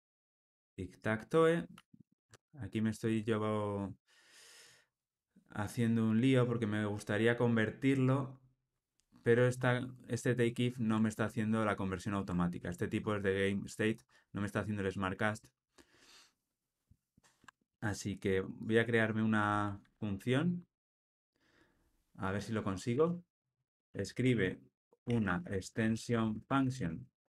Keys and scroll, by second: 1.7 super+z.